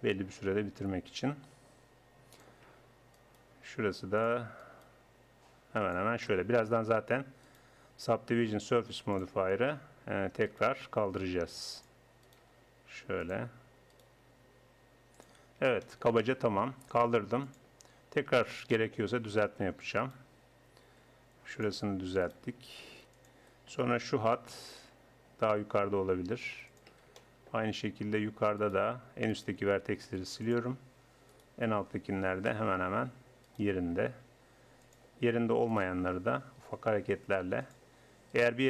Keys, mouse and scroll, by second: 0.5 right click, 0.5 g, 3.2-4.8 right drag, 6.2 right click, 7.9 click, 8.3-9.4 right drag, 8.5 g, 10.5-15.8 right drag, 10.8 g, 12.5 g, 14.1 g, 16.2 Tab, 18.0 Tab, 20.0-21.1 middle drag, 21.1 g, 22.5 g, 24.0 a, 25.5 g, 28.6-30.0 drag, 30.0 x, 32.5 click, 33.2 right click, 33.6 right click, 34.3 g, 36.0 g, 38.3-38.6 drag.